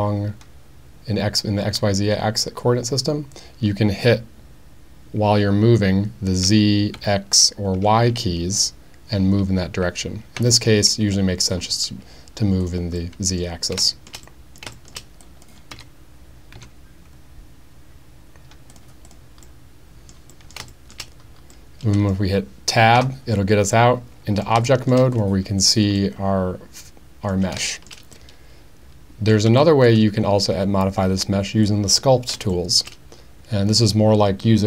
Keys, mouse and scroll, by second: 6.5 z, 7.0 x, 7.8 y, 10.4 z, 12.6 click, 13.0-13.4 middle drag, 13.9 shift+middle click, 14.3 middle click, 14.8 shift+middle click, 15.3 click, 15.7 g, 16.6 z, 18.7 click, 19.1 click, 19.5-20.1 middle drag, 20.1 click, 20.3 click, 20.4 middle click, 20.7 shift+drag, 21.6 middle click, 23.0 Tab, 23.7-24.4 middle drag, 24.7 shift+middle drag, 26.0-27.3 middle drag, 27.7 shift+middle drag, 28.1-29.3 middle drag, 29.6 shift+middle drag, 32.5-32.9 shift+middle drag.